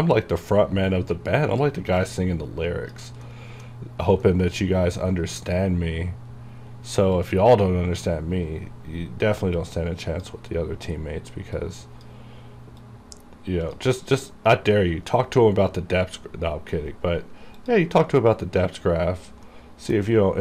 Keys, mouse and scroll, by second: 2.1 click, 3.4 middle click, 3.9-4.4 scroll up 1, 4.4 middle click, 5.2 scroll down 1, 7.3-9.6 drag, 9.6 click, 10.9-11.7 scroll up 1, 12.0 click, 12.5-12.9 scroll down 1, 12.9-16.1 drag, 16.1-17.7 scroll up 2, 17.7 click, 19.6 middle click, 20.2 scroll down 1.